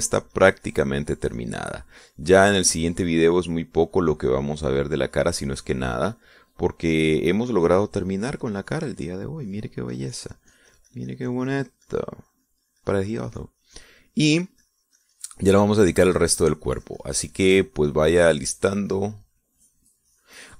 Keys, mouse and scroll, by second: 4.9-11.1 drag, 11.6-19.4 drag, 19.6-20.5 drag.